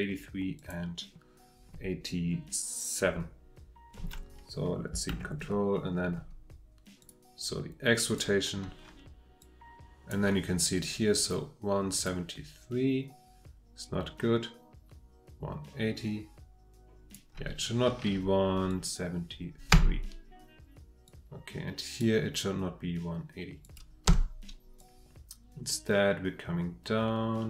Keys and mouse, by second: 0.6 click, 5.1 ctrl+Tab, 7.0 click, 8.0 click, 9.4 click, 12.0-17.1 drag, 18.7 click, 19.7 Delete, 21.0-22.0 middle drag, 23.6 click, 24.1 Delete, 24.8-27.1 middle drag, 27.1-27.4 drag.